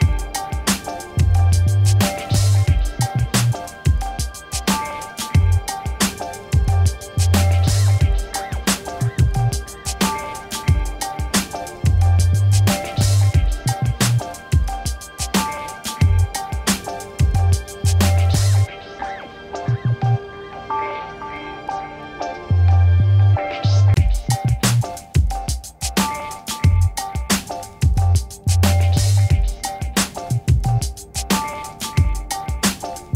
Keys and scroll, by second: 6.3 x, 16.4 1, 16.9 Return, 18.3 m, 20.1 v, 21.9 ctrl+d, 23.7 m, 25.5 v, 27.3 ctrl+d, 29.1 t, 30.8 0, 31.2 Return, 32.3 m.